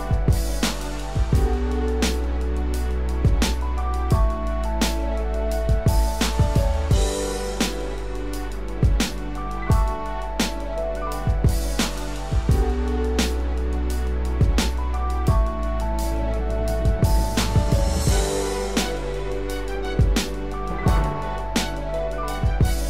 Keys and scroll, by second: 8.6 ctrl+-, 14.5 ctrl+alt+z.